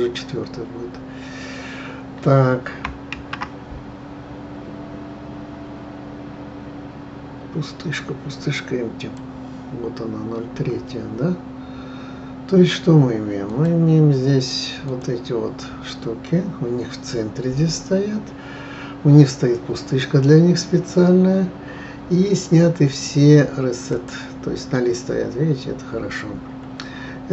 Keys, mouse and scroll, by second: 3.1 shift+a, 13.4 click, 14.9 click, 23.9 click.